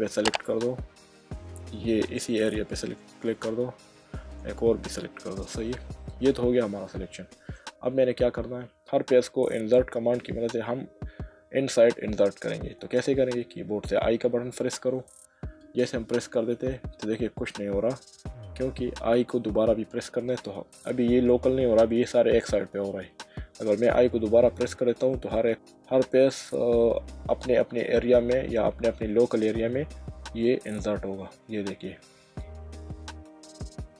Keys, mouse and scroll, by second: 2.8 alt+shift+click, 4.4 click, 5.7 middle click, 31.3 typing.